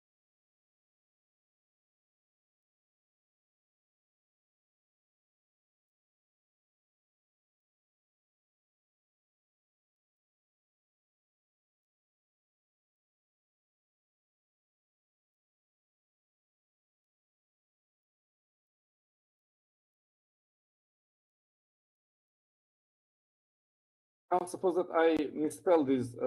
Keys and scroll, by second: 0.4-2.7 typing, 4.2-6.0 typing, 8.0-10.2 typing, 11.9-15.2 typing, 19.4-21.7 typing, 23.3-25.8 typing.